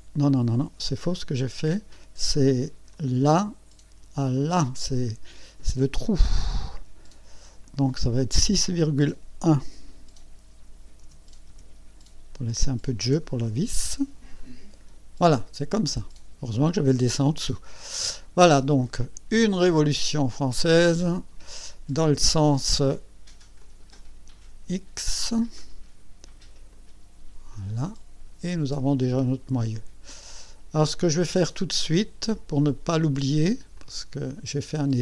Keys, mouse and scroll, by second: 0.2 click, 1.4 Delete, 2.9 click, 4.4 click, 7.6 click, 11.0 KP_6, 11.5 KP_Decimal, 13.0 KP_1, 14.4 click, 17.7 click, 20.6 click, 21.9-22.3 scroll down 1, 22.3 scroll up 1, 23.6 click, 26.7 click, 27.5-29.7 drag, 29.7-31.5 drag, 32.3-33.1 drag, 33.3 scroll down 1, 33.7-34.6 drag.